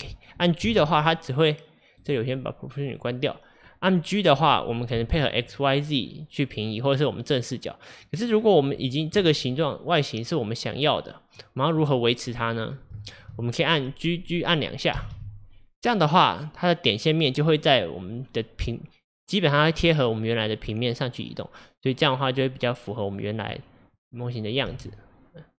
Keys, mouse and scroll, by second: 0.7 g, 2.9 click, 3.7-4.8 scroll down 2, 5.0 g, 8.0 middle click, 8.4-8.9 scroll down 3, 8.9-12.6 shift+middle drag, 12.6 scroll up 1, 13.1-15.0 shift+middle drag, 15.0 g, 23.6 middle click, 24.5 click, 24.8 g.